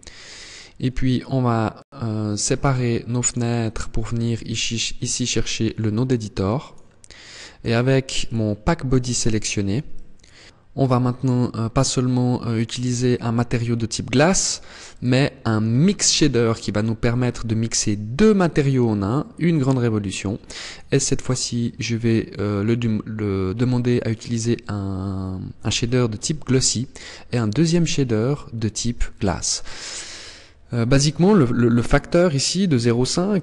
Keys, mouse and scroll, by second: 0.7 scroll up 1, 1.1 click, 3.4 click, 5.7 click, 6.5 click, 7.5 click, 8.2 click, 9.2 click, 14.2 click, 19.9 click, 26.7 click.